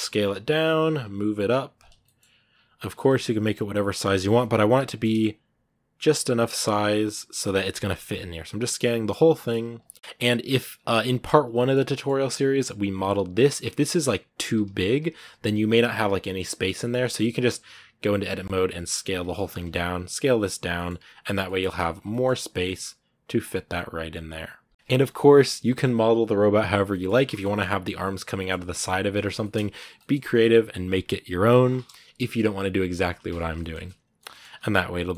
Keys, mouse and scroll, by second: 0.0 s, 1.8 shift+middle click, 2.0 scroll up 1, 2.5 s, 3.9 shift+middle click, 4.1 scroll up 2, 4.4 s, 7.9 scroll down 2, 8.2 s, 8.9 scroll up 2, 9.7 scroll up 3, 9.8 s, 9.9 middle click, 10.0 Tab, 10.3 right click, 10.5 scroll down 1, 10.7 Tab, 11.1 right click, 11.4 shift+middle click, 12.3 s, 18.1 scroll down 1, 18.3 s, 19.3 shift+right click, 19.6 s, 20.5 middle click, 21.4 shift+scroll up 1, 21.6 a, 21.9 shift+middle click, 22.0-23.2 shift+scroll up 7, 23.2-23.5 scroll down 10, 23.5-26.6 middle drag, 26.6 scroll down 1, 26.7-28.8 middle drag, 28.8 scroll down 2, 29.2-31.4 shift+middle drag, 31.4 shift+c, 32.0 KP_1, 33.4 shift+middle click, 34.3 scroll up 1, 34.5-35.1 middle drag.